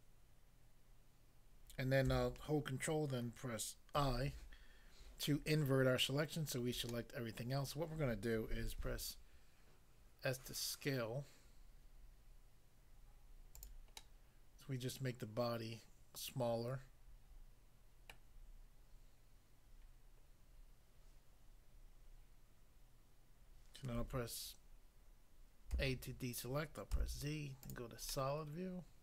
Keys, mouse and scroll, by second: 4.0 ctrl+i, 6.8 middle click, 7.4 middle click, 8.8 s, 13.6 click, 13.7 click, 14.0 middle click, 18.1 middle click, 25.7 a, 27.0 z, 27.6 click, 28.1 middle click.